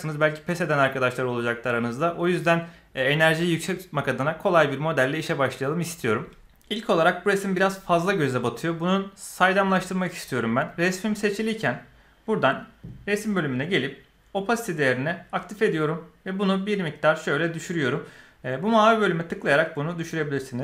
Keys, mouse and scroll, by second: 12.7 click, 15.3 click, 16.4-17.8 drag, 18.6-20.6 drag.